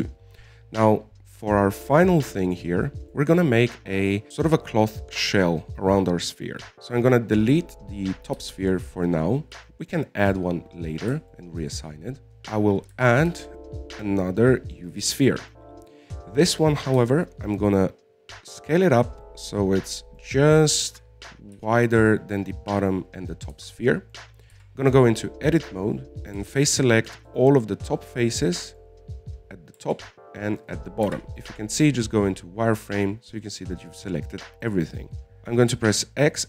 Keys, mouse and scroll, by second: 0.5 scroll down 3, 1.3 KP_1, 2.0-4.3 scroll up 4, 4.3 click, 8.2-9.7 scroll down 1, 9.7 x, 11.0-12.1 shift+middle drag, 12.1 scroll up 2, 12.3 scroll down 1, 14.7 shift+a, 16.6-18.4 middle drag, 18.4 s, 20.6-22.3 middle drag, 22.3 z, 22.9 KP_1, 24.9 z, 25.3 middle click, 25.9 Tab, 26.2 right click, 27.7 c, 28.9-31.1 middle drag, 31.1 c, 32.5 z, 32.8-35.0 middle drag, 35.0-35.4 scroll down 5, 35.4 middle click, 35.7 z, 36.1-36.4 scroll up 2.